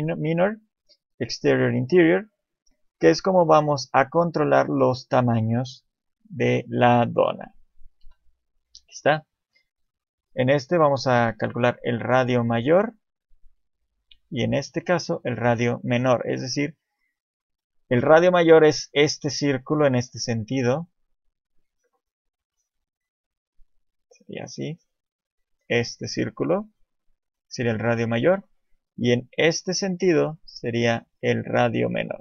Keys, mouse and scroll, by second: 4.3 click, 6.0 t, 7.3 t, 8.0 KP_7, 9.5 click, 14.4 click, 16.5 middle click, 17.4 KP_7, 24.0 click, 24.0 d, 28.4 d, 28.4 KP_1, 29.1-29.9 d, 29.9 click, 32.1 d.